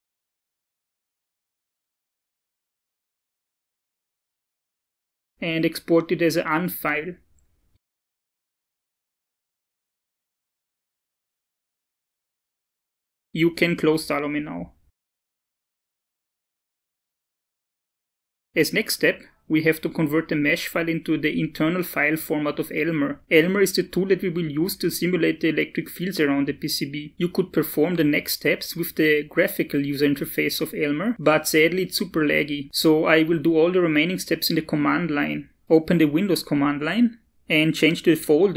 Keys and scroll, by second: 31.4 shift+super+s, 35.5 alt+Tab.